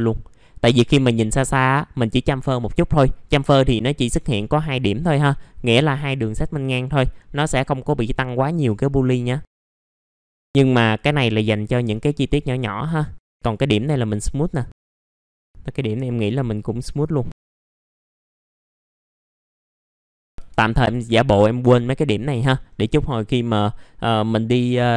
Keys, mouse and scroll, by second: 1.0 click, 2.1-2.7 scroll up 1, 2.7 middle click, 3.2-4.2 scroll up 1, 8.5-9.2 scroll down 1, 9.2 middle click, 9.5-9.8 scroll up 2, 9.5 middle click, 9.8 click, 11.2-11.6 scroll down 1, 11.6 middle click, 12.3 click, 13.0 right click, 13.4 click, 15.1 ctrl+click, 15.2 click, 15.4 right click, 16.0 click, 17.5 middle click, 17.6 scroll up 1, 17.8-19.2 drag, 19.2 right click, 19.4 click, 19.6 middle click, 19.6 scroll down 1, 19.8 middle click, 20.0 scroll up 1, 22.3 middle click, 22.5 scroll down 1.